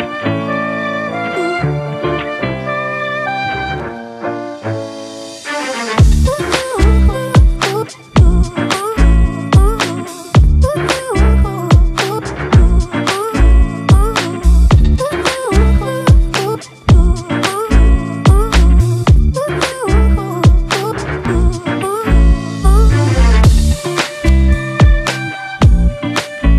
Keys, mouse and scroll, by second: 4.8 double click, 6.3 typing, 8.7 double click, 10.7-11.6 typing, 12.0 double click, 20.8 ctrl+t, 21.8 ctrl+click, 24.5 Return.